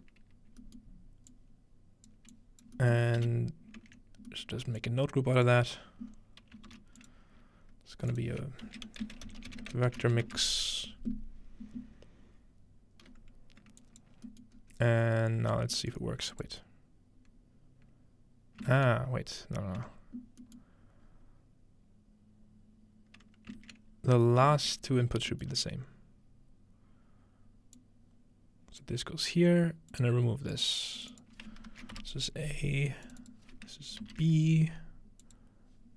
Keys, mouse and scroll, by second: 3.2-4.3 typing, 4.8 click, 6.2-7.1 scroll up 1, 6.7 shift+d, 7.0-10.0 drag, 8.7-10.8 typing, 13.8 click, 14.1-14.6 scroll down 2, 14.6 scroll up 2, 15.8-16.5 middle drag, 16.3 click, 19.8 Tab, 20.4-23.5 middle drag, 21.1-22.3 scroll up 1, 23.6 ctrl+space, 25.3 middle click, 25.5 Tab, 27.8-32.1 drag, 31.7 shift+a, 32.0 Return, 32.2 click, 33.1 shift+click, 34.0 shift+b, 35.2 shift+click.